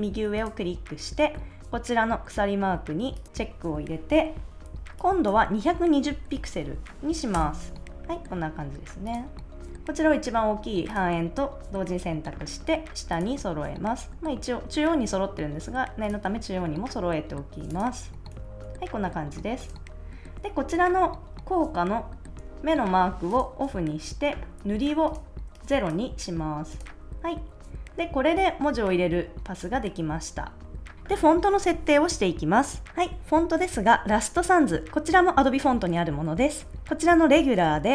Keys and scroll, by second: 6.2 2, 6.5 0, 7.3 Return, 18.3 super+s.